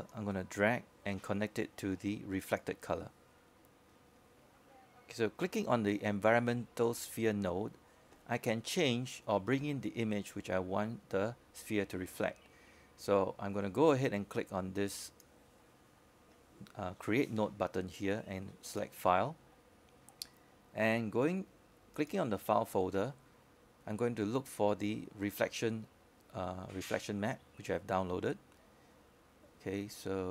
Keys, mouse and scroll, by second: 0.1-3.3 scroll up 1, 3.3-6.0 drag, 7.5-8.2 scroll down 1, 8.7-30.3 drag.